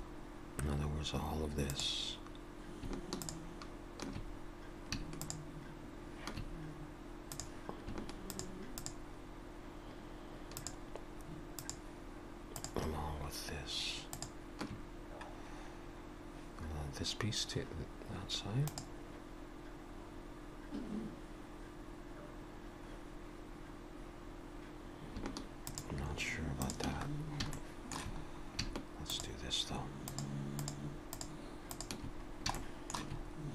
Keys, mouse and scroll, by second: 0.0-1.3 scroll up 2, 1.7 click, 3.1 shift+click, 4.3 scroll up 1, 5.2 shift+click, 7.2 click, 8.6 shift+click, 15.0-17.1 scroll down 1, 25.6 click, 26.6 shift+click, 27.1-27.5 scroll down 3, 27.5 shift+middle click, 28.2-28.6 scroll up 2, 29.1 shift+click, 30.1 shift+click, 30.5 shift+click, 31.3 shift+click, 32.2 scroll down 2, 32.5 shift+middle click, 33.2-33.5 scroll up 2.